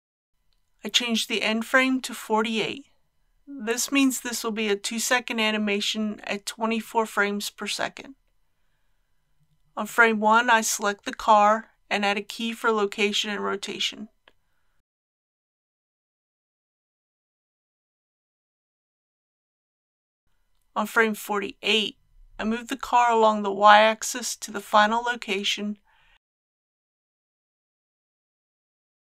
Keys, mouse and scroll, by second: 5.2 KP_4, 5.3 KP_8, 8.0 click, 15.4 i, 16.7-22.7 drag, 26.7 g, 27.4 y.